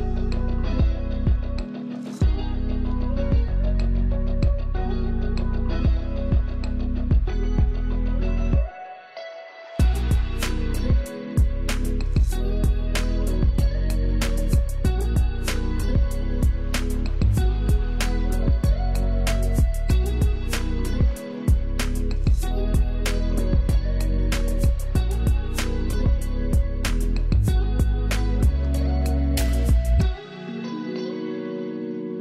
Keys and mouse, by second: 1.8-7.0 drag, 7.0-9.4 drag, 9.4 ctrl+z, 10.8 Down, 14.6 click, 15.5 ctrl+space, 15.7 ctrl+alt+click, 20.7 ctrl+click, 21.6 ctrl+z, 22.0 click, 22.8 ctrl+z, 25.2 alt+click, 25.8-29.3 alt+shift+drag, 29.3 ctrl+space, 29.5 ctrl+alt+click, 30.6 Left, 31.4 Down.